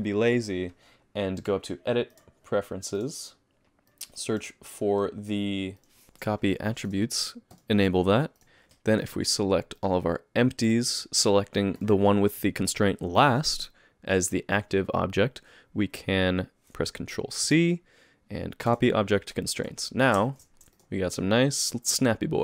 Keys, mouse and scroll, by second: 1.4 click, 8.6 alt+a, 8.6 click, 9.0 shift+click, 9.8 click, 10.7 click, 11.8 shift+click, 17.4 ctrl+c, 19.8-20.1 scroll down 5, 20.2 shift+middle click, 20.7 click, 21.0 g.